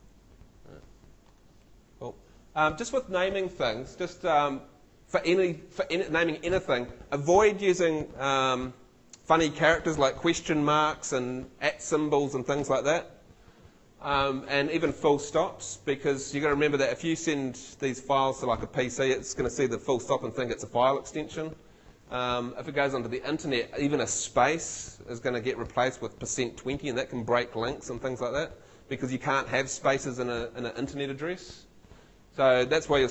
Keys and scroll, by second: 0.0-0.5 typing.